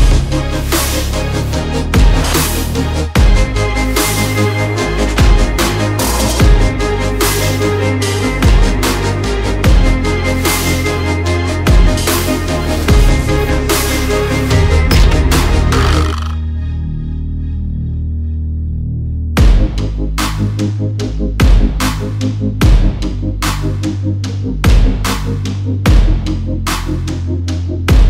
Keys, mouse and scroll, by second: 0.2 alt+scroll, 0.3 alt+scroll up 1, 0.7 click, 1.8 alt+scroll down 1, 2.7 click, 3.9 click, 7.8-10.1 typing, 11.2 click, 12.0 alt+click, 13.2 click, 14.6 alt+scroll up 1, 15.0 click, 16.8 alt+scroll down 1, 17.1-17.4 alt+scroll up 1, 17.6 click, 18.0 alt+scroll up 1, 18.3 click, 19.2 alt+click, 20.3 alt+scroll down 1, 20.6 click, 22.0 click, 27.0 click, 27.1 alt+scroll down 1, 27.5 alt+scroll up 1.